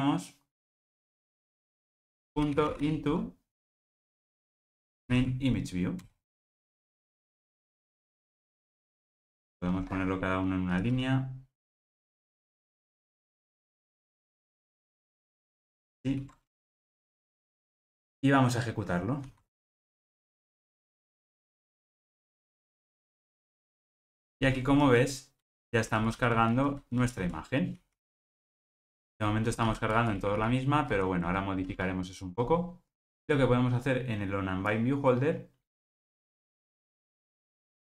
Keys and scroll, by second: 4.6 Return, 6.8 alt+super+l, 16.0 alt+super+l.